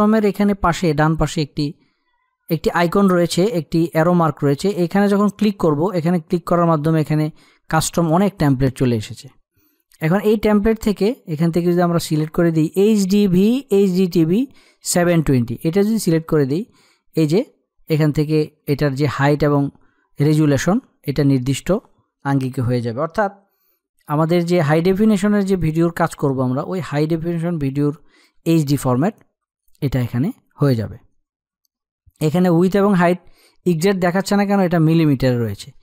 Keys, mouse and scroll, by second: 4.4 click, 9.9-15.0 drag, 15.5 click, 23.9 ctrl+Num_Lock, 23.9 click, 24.1 ctrl+=, 26.1 space, 26.3 click, 26.7 space.